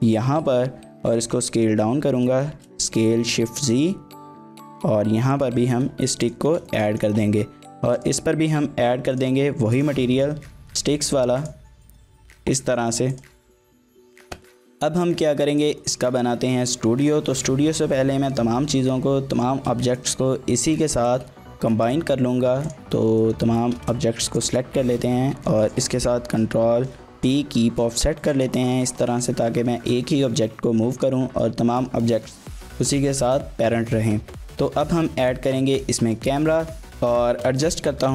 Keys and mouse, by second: 0.4 KP_1, 1.4 s, 2.5 shift+z, 5.4 click, 5.8 Tab, 6.7 shift+middle drag, 6.9 middle click, 9.2 drag, 9.8-11.1 drag, 11.4 drag, 12.0 shift+middle drag, 12.2 middle click, 12.7 shift+middle click, 13.1 click, 13.6 shift+middle drag, 13.9 middle click, 15.5 click, 15.8 shift+middle click, 16.1 middle drag, 17.3 shift+middle click, 17.6 g, 19.3 right click, 19.9 shift+middle click, 21.1 click, 23.2 shift+middle click, 24.4 shift+click, 26.5 ctrl+p, 28.3 click, 28.7 g, 30.9 click, 34.4 shift+click, 35.1-38.1 typing, 37.6 shift+drag.